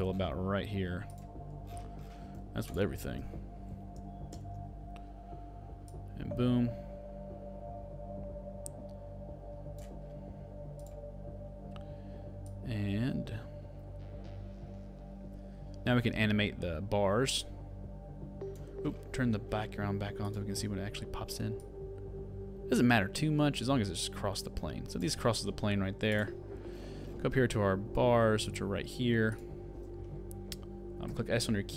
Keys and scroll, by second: 4.4 alt+[.